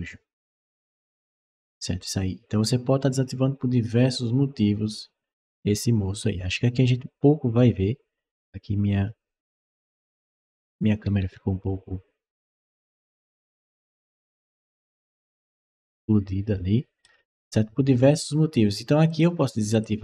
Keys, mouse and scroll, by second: 10.6-16.8 right drag, 10.6-14.8 typing, 18.9 click, 19.6 click.